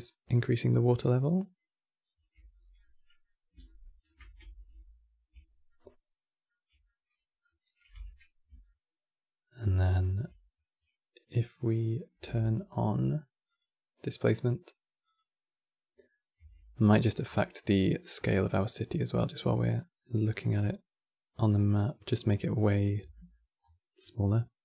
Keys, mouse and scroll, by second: 5.6 Tab, 15.2 click.